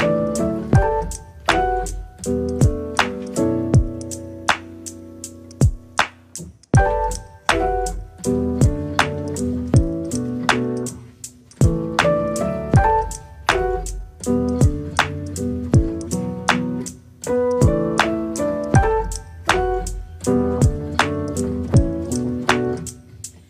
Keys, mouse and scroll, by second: 2.7 middle click, 3.1 click, 3.3-4.5 middle drag, 6.4 middle click, 6.8 click, 7.1 middle click, 7.6 shift+click, 7.9 shift+click, 8.2-9.4 middle drag, 10.6-11.8 middle drag, 12.5 click, 12.7-13.9 middle drag, 14.7 ctrl+click, 15.5-16.3 scroll up 20, 16.3 click, 16.7 click, 17.6-19.6 right drag, 19.8 a, 21.6 s.